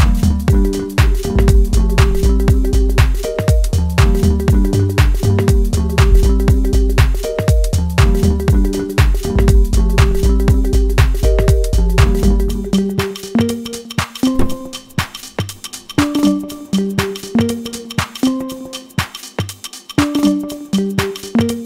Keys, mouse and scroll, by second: 2.1 shift+middle click, 2.7-3.4 scroll up 1, 3.7 right click, 4.5-6.2 shift+middle drag, 6.2 click, 7.2-11.1 shift+middle drag, 12.5 click.